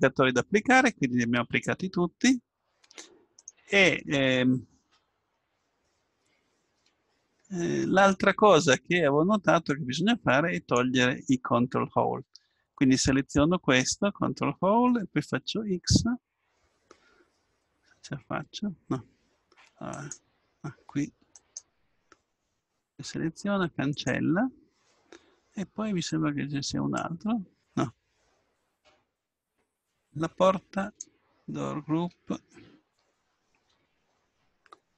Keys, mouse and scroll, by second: 4.5 click, 4.5-7.4 middle drag, 9.7-13.1 drag, 13.4-15.1 drag, 15.7 x, 20.7 x, 21.4-23.4 drag, 21.4-22.7 right drag, 26.1-28.9 drag.